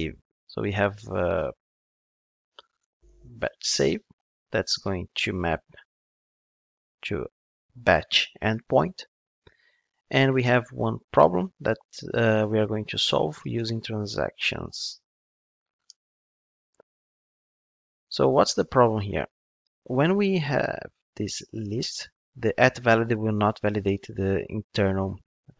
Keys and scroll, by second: 15.9 alt+Return, 17.6 alt+Return.